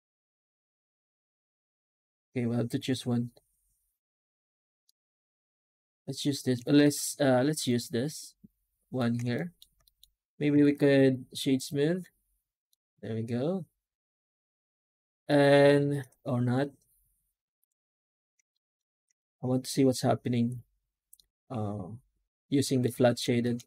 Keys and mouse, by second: 4.7-6.4 middle drag, 6.7 shift+middle click, 7.5-8.8 middle drag, 9.2 shift+middle drag, 9.7 middle drag, 10.4 w, 12.5-15.1 middle drag, 18.4 shift+middle drag, 18.9-21.0 drag, 21.0-22.7 middle drag, 23.3 shift+middle click.